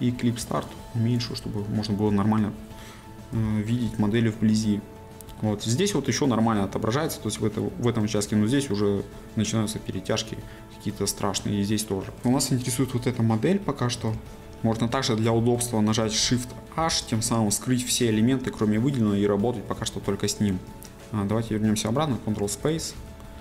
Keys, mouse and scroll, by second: 0.8-1.8 drag, 0.8 s, 2.2 scroll, 4.0-10.0 shift+middle drag, 10.0-12.2 scroll, 14.4-16.8 shift+middle drag, 20.1-23.4 shift+middle drag.